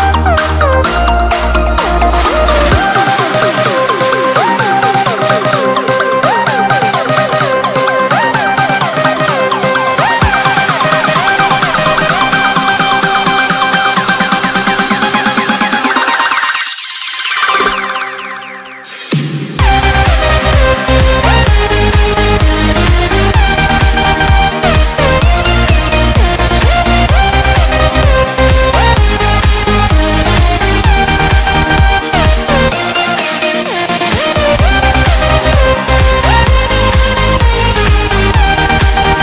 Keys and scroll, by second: 1.8 Escape, 2.4 F2, 8.5 shift+Page_Up, 11.6 c, 11.9 Escape, 18.4 shift+Page_Up, 18.9 Escape, 19.9 Delete, 21.2 F2, 24.1 ctrl+g, 26.2 c, 26.5 Escape, 28.5 Escape, 29.6 F6, 34.8 space, 35.0 F2, 38.4 F4.